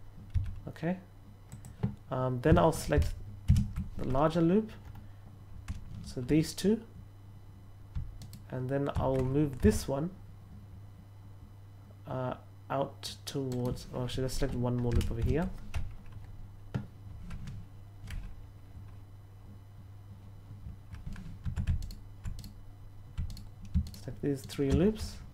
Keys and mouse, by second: 0.2 s, 1.4 click, 8.1 alt+right click, 9.5 s, 13.5 right click, 21.7 alt+right click, 23.2 alt+right click, 24.4 alt+shift+right click.